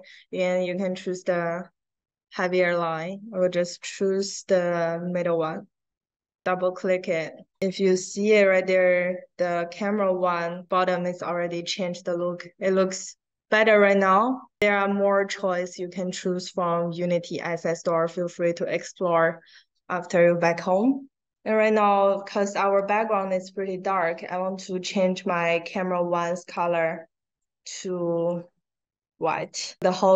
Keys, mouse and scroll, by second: 7.6 middle click, 7.9-8.2 drag, 8.6 middle click, 9.0-9.3 drag, 9.8 middle click, 10.2 drag, 22.0 middle click, 22.7 click, 23.8 middle click, 24.2 click, 26.3 click, 27.3-28.2 drag, 29.2 click, 29.9 middle click, 30.0 scroll up 1.